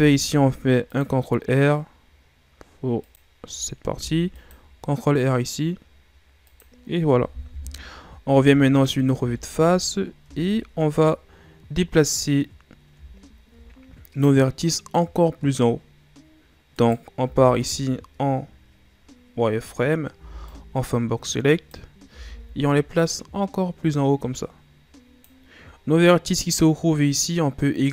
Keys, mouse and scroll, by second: 3.9 ctrl+r, 7.5 KP_1, 8.6-9.2 shift+scroll up 3, 9.2 Tab, 10.2 Tab, 11.3-14.3 scroll up 1, 16.7 right click, 17.2 z, 20.1 b, 22.1 z, 22.9-25.6 drag, 25.6-27.9 scroll up 2.